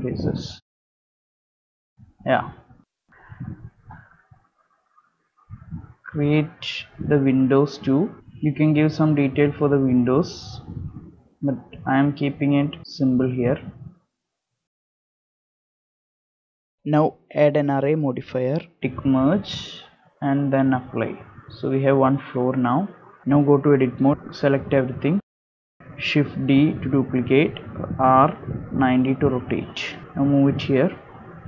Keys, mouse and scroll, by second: 0.7 shift+middle click, 0.9 click, 0.9 shift+click, 1.0 middle click, 1.2 shift+click, 1.2 middle click, 1.4 shift+click, 1.5 x, 1.6 middle click, 3.6 middle click, 4.5 middle click, 5.1 ctrl+r, 7.9 ctrl+r, 10.0 ctrl+r, 11.4 ctrl+r, 13.8 3, 14.1 ctrl+click, 14.4 ctrl+click, 14.5 middle click, 14.8 e, 16.1 Tab, 16.3 scroll down 2, 16.5 middle click, 16.9 scroll up 2, 17.1 click, 18.5 middle click, 18.9 shift+middle click, 20.0 click, 21.9 click, 22.3 scroll down 3, 22.5 middle click, 23.2 scroll up 1, 23.2 Tab, 23.2 shift+middle click, 23.2 scroll down 2, 23.2 KP_7, 23.2 a, 23.5 Tab, 23.8 scroll up 1, 23.8 1, 23.8 KP_7, 24.9 shift+middle click, 25.9 shift+d, 29.2 scroll down 2, 29.5 shift+middle click, 30.4 g.